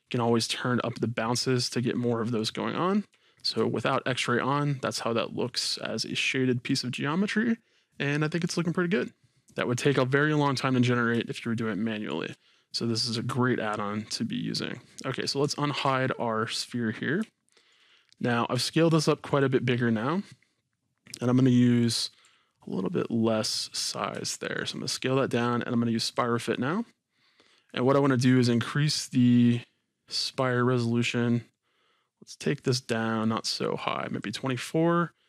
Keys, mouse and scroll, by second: 2.4 click, 2.9 scroll down 2, 3.2-7.8 shift+middle drag, 9.4-9.9 scroll up 2, 11.3-15.3 shift+middle drag, 15.7 alt+h, 16.4-18.4 middle drag, 16.4-17.2 scroll down 2, 17.9-18.4 scroll down 2, 18.4-19.3 scroll up 2, 18.7-19.3 middle drag, 19.3 click, 20.7-21.5 middle drag, 21.8 click, 22.2 s, 23.5-26.0 middle drag, 23.8-24.1 scroll up 2, 24.1 shift+scroll, 24.8-25.4 scroll up 2, 25.4-26.0 scroll down 2, 26.0 click, 28.3-35.2 drag.